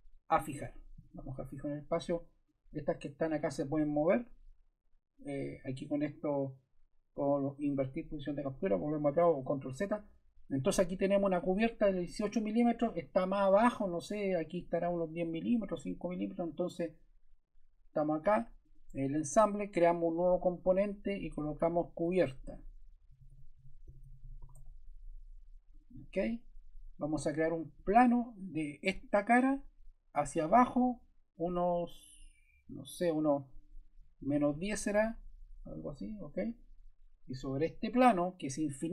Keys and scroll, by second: 22.8-25.0 typing, 33.7-34.9 typing.